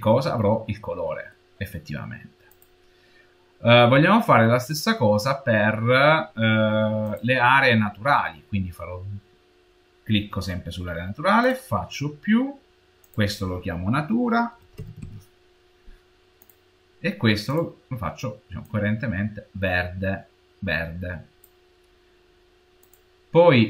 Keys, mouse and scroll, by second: 0.0 middle click, 5.0-6.9 scroll down 1, 6.9 scroll down 1.